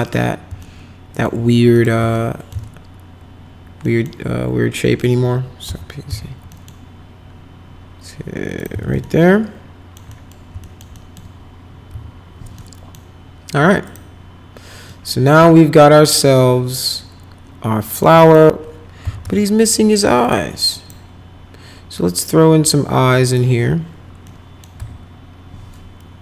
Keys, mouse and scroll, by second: 0.6 alt+middle click, 1.7 click, 2.1 alt+middle click, 2.5 z, 3.8 middle click, 4.7 middle click, 5.6 p, 6.1 z, 6.5 middle click, 8.5 click, 8.7 z, 9.0 alt+middle click, 10.1 middle click, 10.6 alt+middle click, 10.9 middle click, 11.8 F4, 12.6 middle click, 13.8 click, 14.8-18.0 middle drag, 18.2 click, 18.8-19.8 typing, 20.3 click, 20.8 click, 23.3 click, 24.3 middle click, 24.8 F4.